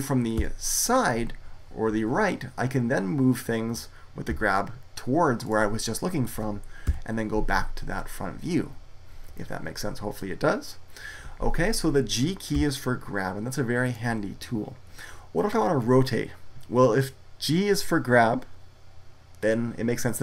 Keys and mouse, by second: 0.3 KP_3, 4.2 g, 5.4-6.7 drag, 6.7 KP_1, 12.4 g, 13.8-15.6 drag.